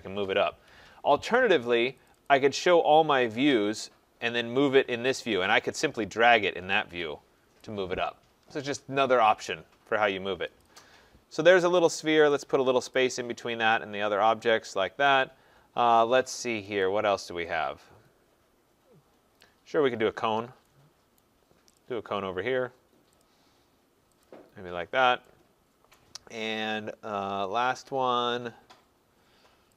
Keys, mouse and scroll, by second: 0.7 Escape, 2.1 click, 2.3 click, 3.1-4.2 scroll, 4.2-5.5 scroll, 7.6 click, 10.6 click, 10.8 click, 11.7 middle click, 13.0 click, 14.1 scroll, 15.1 right click, 16.8 click, 19.5 click, 21.2 right click, 21.8 click, 23.3 click, 24.3 click, 24.9 middle click, 25.0 middle click, 26.0 right click.